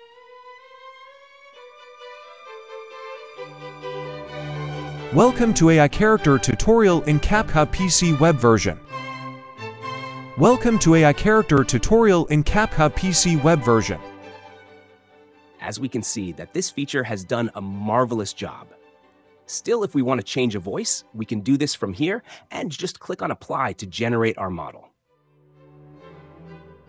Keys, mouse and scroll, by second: 3.1-4.1 drag, 4.8 space, 10.1 space, 13.9 space, 15.2 click, 16.4-17.4 drag, 20.8-21.8 drag, 24.1-25.1 drag, 25.3-26.3 drag.